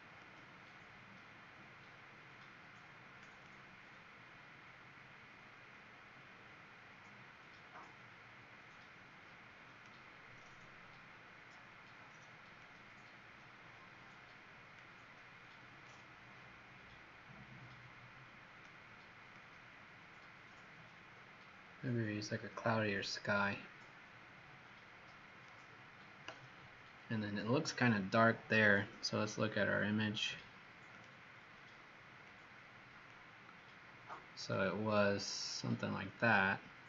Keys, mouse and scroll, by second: 31.1 click.